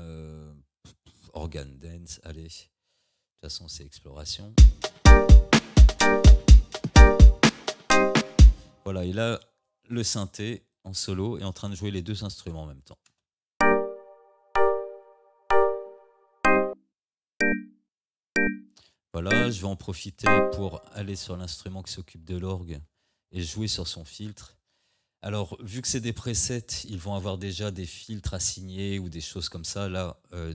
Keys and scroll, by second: 4.6 space, 8.5 space, 13.1 space, 20.9 space.